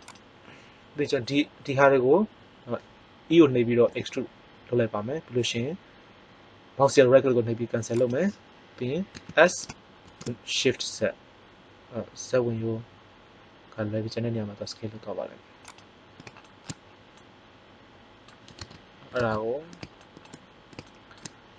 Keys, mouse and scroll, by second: 3.8 e, 8.2 right click, 9.0 s, 15.8 click, 16.1-17.8 middle drag, 18.0 middle click.